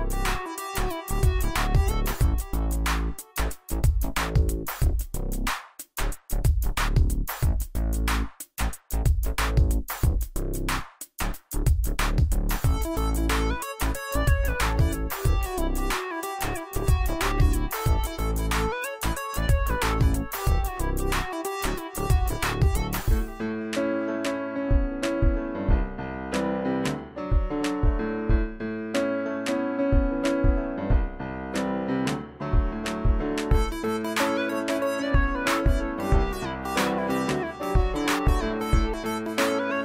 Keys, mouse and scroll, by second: 6.3 click, 7.2 alt+click, 7.7 space, 7.9-9.3 click, 8.2 space, 10.2 click, 16.1 click, 18.5 click, 20.5 scroll down 1, 21.4-29.2 drag, 34.8 right click, 36.0 click, 38.9-39.8 drag.